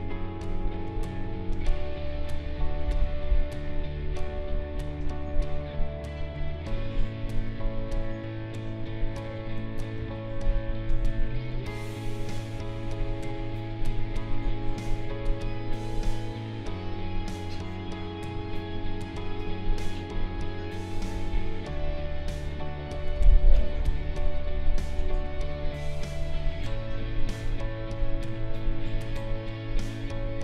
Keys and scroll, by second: 10.0 ctrl+z, 23.1 space.